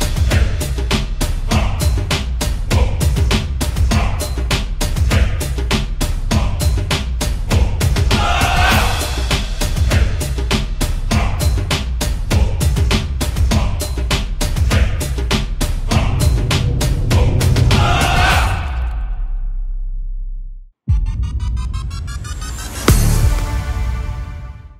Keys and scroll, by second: 8.4 1, 13.0 r, 13.5 w, 17.6 Left, 17.6 typing, 20.4-21.2 typing.